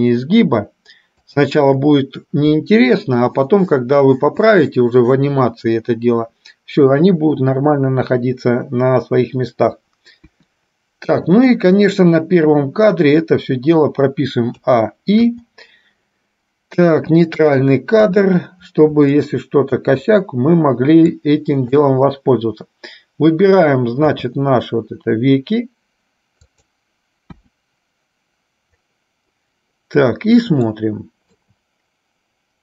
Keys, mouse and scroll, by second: 10.2 KP_1, 14.7 a, 15.6 i, 18.1 KP_3, 19.4 shift+middle click, 21.2 click, 24.2 r, 27.6 KP_1, 30.9 shift+middle click.